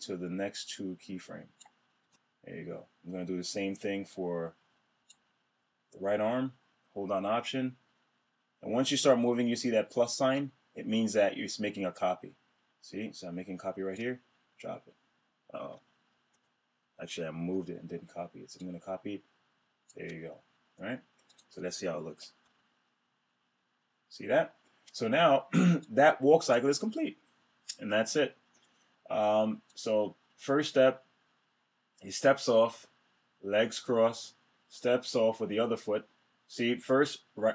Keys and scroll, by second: 15.8 super+z, 22.0 Return.